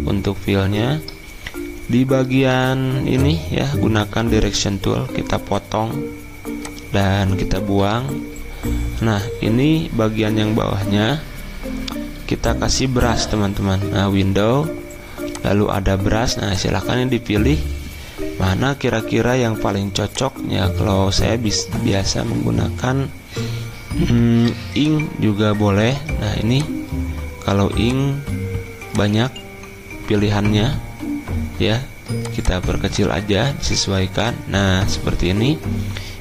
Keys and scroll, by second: 2.5 a, 7.8 Delete.